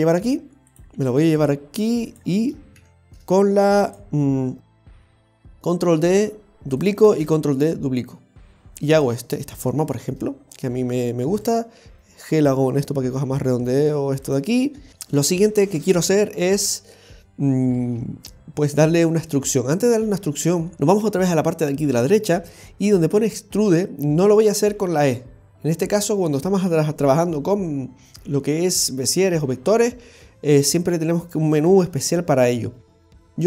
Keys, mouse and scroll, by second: 0.9 g, 2.8 shift+s, 5.1 shift+d, 7.1 shift+d, 9.9-10.4 scroll up 2, 10.4-11.4 scroll down 2, 11.4 right click, 12.4 g, 18.8-19.3 scroll down 1, 19.3 middle click, 21.3-22.7 scroll down 3.